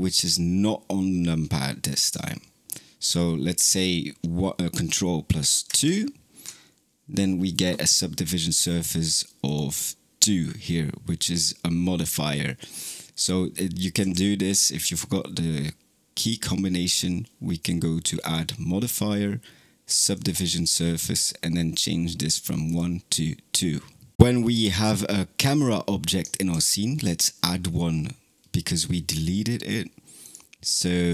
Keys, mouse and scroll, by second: 5.5 ctrl+2, 9.3 click, 20.1-21.1 drag, 22.5-24.1 drag, 26.4 shift+a.